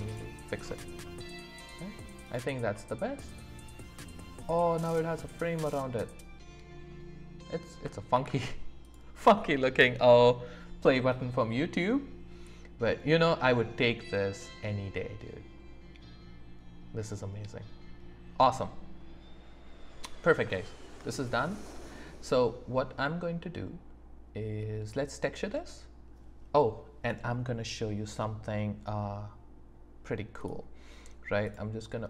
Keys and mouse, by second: 0.1 click, 1.0 middle click, 2.2 click, 2.7-7.7 middle drag, 8.1 ctrl+s, 11.2 click, 11.4-13.1 middle drag, 14.9-20.3 middle drag, 20.6 shift+middle click.